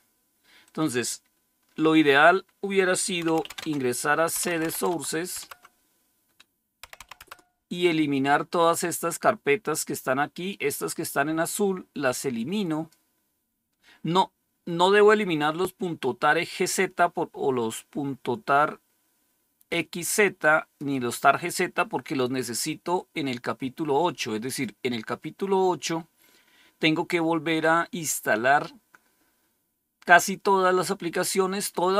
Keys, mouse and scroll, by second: 0.5 click, 2.9-5.0 typing, 5.3 Return, 6.5-7.4 typing, 9.6-11.1 drag, 11.1-11.8 typing, 11.9-13.7 drag, 20.3-22.7 drag, 24.3 click, 27.5-29.1 scroll down 1, 29.1-30.2 scroll down 1, 30.2-30.7 scroll down 1, 30.7 scroll down 1.